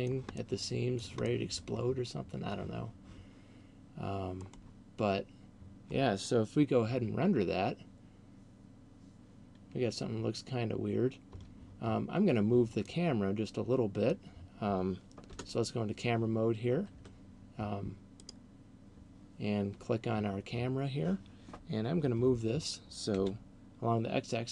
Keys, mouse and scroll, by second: 0.5 middle click, 1.3 middle click, 11.3 Escape, 13.0 middle click, 15.3 KP_0, 17.0 Tab, 18.3 right click, 23.3 g.